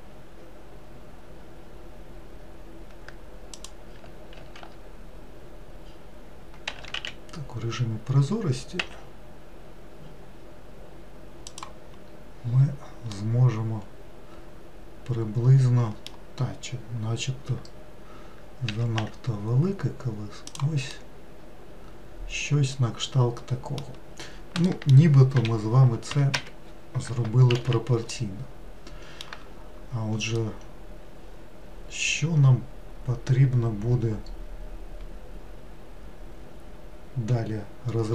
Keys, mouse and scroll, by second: 4.4 alt+z, 6.8 s, 12.0-13.3 scroll down 2, 13.3-16.2 middle drag, 18.8 s, 21.0-24.2 middle drag, 24.8 middle click, 25.4 m, 27.7 alt+z, 28.2-33.6 middle drag.